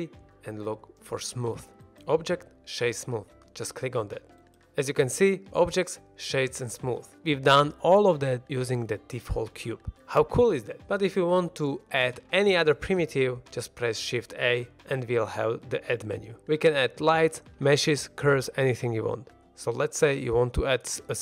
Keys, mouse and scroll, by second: 0.4 o, 4.5-5.2 scroll down 1, 5.2-7.1 middle drag, 10.9 scroll down 1, 11.2 shift+middle drag, 11.5-11.9 middle drag, 14.4 shift+a.